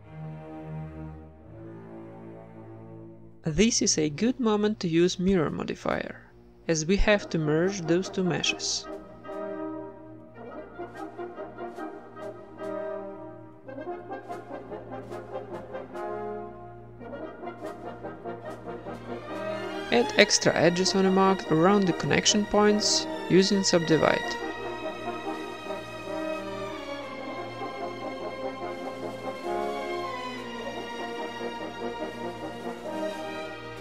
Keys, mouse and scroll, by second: 1.1 Tab, 2.1 middle click, 2.3 middle click, 4.0 middle click, 4.4 ctrl+r, 4.7 right click, 4.8 Tab, 5.1 Tab, 5.4 ctrl+r, 5.9 Tab, 5.9-6.9 typing, 7.6 Tab, 8.2-9.4 drag, 9.5-10.6 drag, 10.6-12.0 drag, 11.2 middle click, 11.3-14.3 typing, 11.8 right click, 12.6 Tab, 13.4-14.6 right drag, 14.9 Tab, 15.6-17.6 right drag, 16.0 middle click, 16.1 z, 17.1 ctrl+l, 17.9 a, 18.0 middle click, 18.3-19.3 drag, 18.3-19.3 right drag, 19.3 middle click, 19.5-20.5 right drag, 19.7 ctrl+s, 19.9 click, 20.1 Tab, 20.5 middle click, 20.6 ctrl+Tab, 21.0-22.4 right drag, 21.6 w, 22.5 right click, 22.7 w, 23.0 ctrl+Tab, 23.5-25.3 right drag, 24.2 j, 24.8 g, 25.7-27.2 right drag, 25.8 g, 26.5 g, 27.3 middle click, 27.5 ctrl+Tab, 27.8 click, 27.8 right click, 27.9 w, 28.2-30.6 right drag, 28.3 ctrl+Tab, 29.4 j, 29.7 g, 30.2 g, 30.8 right click, 30.9 g, 31.7 middle click, 32.6 ctrl+Tab, 32.9 click, 32.9 middle click, 33.2 shift+right click, 33.3-33.8 typing.